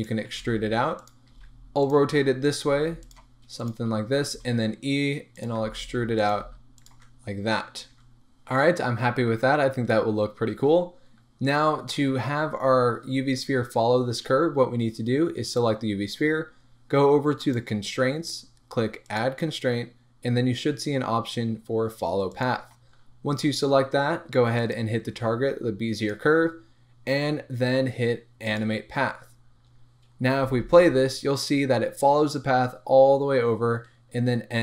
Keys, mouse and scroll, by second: 0.1 click, 0.3 r, 1.1 click, 1.3 g, 1.9 click, 2.5 click, 2.7 g, 3.6 click, 4.2 e, 5.5 click, 5.6 r, 6.3 click, 6.4 g, 6.8 click, 6.9 Tab, 7.2-7.8 scroll down 1, 7.8 scroll up 1, 8.0 Tab, 10.4-12.9 scroll up 1, 15.5 click, 17.4-34.6 drag, 30.3 space, 31.9 scroll down 1.